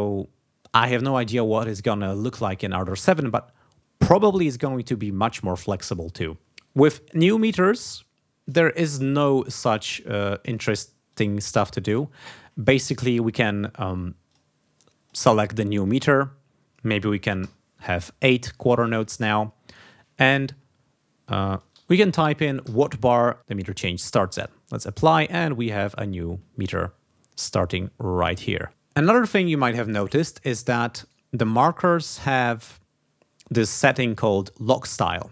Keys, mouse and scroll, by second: 8.8 click, 10.4 ctrl+click, 11.0 ctrl+click, 14.2 click, 14.7 click, 17.3 8, 21.2 click, 22.6 2, 24.4 click, 26.0 ctrl+scroll down 2, 28.6 ctrl+scroll up 2, 31.0 right click, 32.3 click.